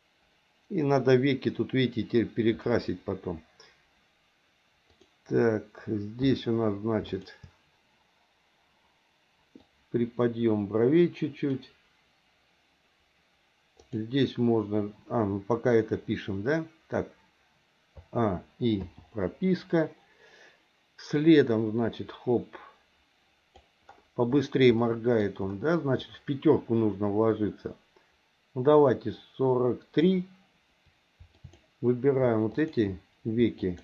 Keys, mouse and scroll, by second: 4.9 click, 7.0 shift+click, 9.6 click, 10.0-11.6 drag, 13.8 click, 18.0 a, 18.8 i, 21.2-23.7 drag, 24.8 middle click, 27.4-30.1 drag, 31.3 click, 32.5 shift+click, 33.6 shift+click.